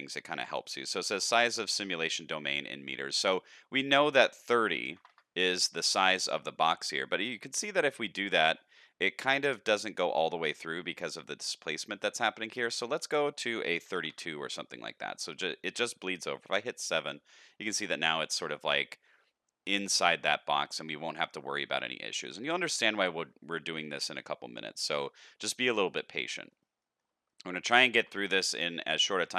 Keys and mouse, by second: 3.9-5.4 drag, 6.1-8.2 middle drag, 8.7-9.7 shift+middle drag, 10.5 middle click, 13.1-14.4 drag, 15.4-15.8 middle drag, 16.4 KP_7, 18.7-19.0 shift+middle drag, 20.4 shift+middle drag, 22.3 shift+middle click, 25.6-26.5 middle drag, 26.7 shift+middle drag, 27.2 middle click, 27.7 shift+middle drag, 28.2 middle click, 28.6 shift+middle click, 29.0 middle click.